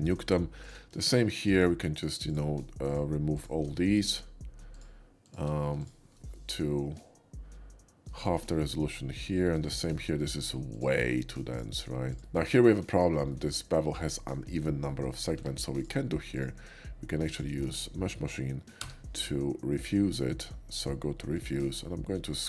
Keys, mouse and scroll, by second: 0.6-3.7 shift+drag, 3.7 shift+middle click, 4.7 shift+click, 5.6 x, 5.7 click, 6.3-8.1 middle drag, 8.2 shift+middle click, 8.7 shift+middle click, 9.4 shift+middle click, 9.7 shift+middle click, 9.9 shift+middle click, 10.7 shift+click, 11.5 alt+shift+click, 13.3 shift+middle click, 14.8 shift+middle click, 15.3 Tab, 15.7 click, 16.3 click, 16.6 middle click, 17.2 ctrl+click, 18.8 y, 21.3 click, 21.9 middle click, 22.2 middle click.